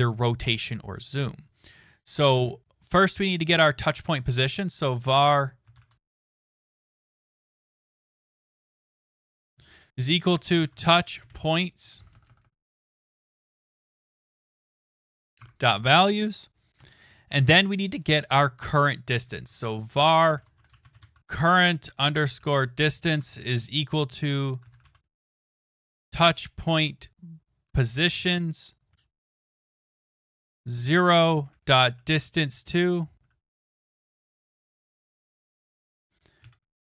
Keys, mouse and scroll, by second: 1.8-2.8 typing, 4.9-13.0 typing, 14.4-16.0 typing, 17.1 Return, 19.1-23.1 typing, 24.2-26.7 typing, 30.1-36.8 typing.